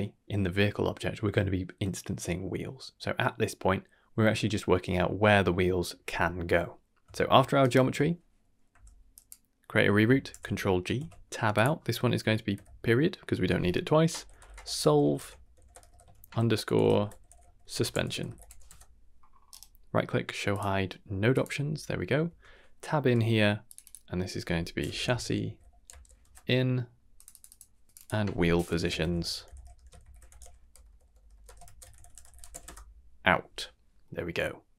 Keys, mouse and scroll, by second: 3.4 scroll up 2, 6.0 middle click, 6.0 scroll up 1, 7.6 shift+right click, 8.7 g, 9.7 scroll up 2, 10.3 ctrl+g, 10.9 Tab, 11.5-18.6 drag, 19.2 scroll up 1, 19.5-20.6 right drag, 21.3 click, 22.2 Tab, 22.9 n, 23.6 click, 23.8-26.2 drag, 25.4 s, 27.1 click, 27.3 click, 27.9-32.6 drag, 29.2 e, 30.8 BackSpace, 31.0 BackSpace.